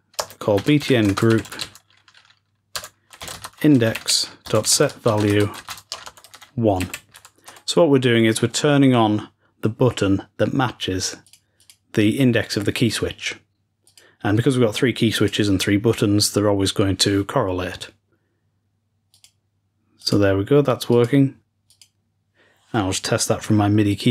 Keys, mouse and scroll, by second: 11.3-12.3 drag, 13.7 click, 15.0 click, 19.0-20.8 drag, 20.8 click, 21.1 click, 21.6 click.